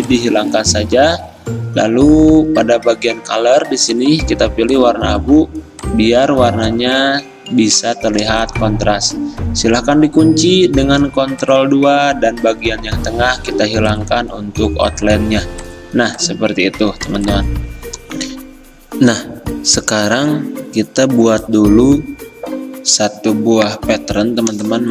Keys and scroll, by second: 7.7 ctrl+z, 10.3 ctrl+2.